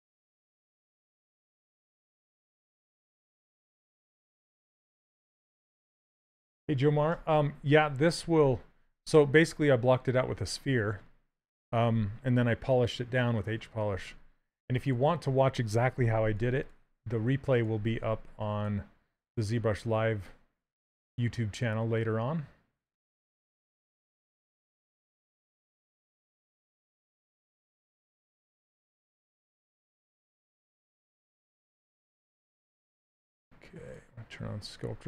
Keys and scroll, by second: 15.6 w.